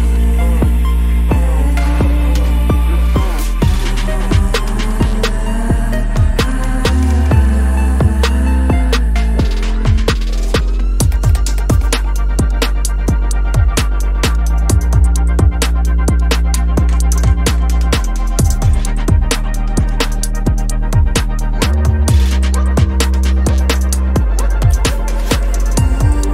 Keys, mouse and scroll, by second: 0.4 p, 1.8 ctrl+-, 1.9 space, 2.7 ctrl+z, 2.8 ctrl+z, 5.0 double click, 5.2 space, 5.3 double click, 5.7 ctrl+z, 6.6 right click, 11.7 ctrl+-, 11.8 ctrl+-, 12.1 ctrl+-, 12.3 ctrl+-, 12.5 ctrl+-, 14.6 double click, 15.7-16.7 typing, 17.4 double click, 19.8 double click, 20.1 typing, 22.5 double click, 23.0 double click, 23.4 typing, 25.5 ctrl+=, 25.7 ctrl+=, 25.8 ctrl+=, 26.0 ctrl+=.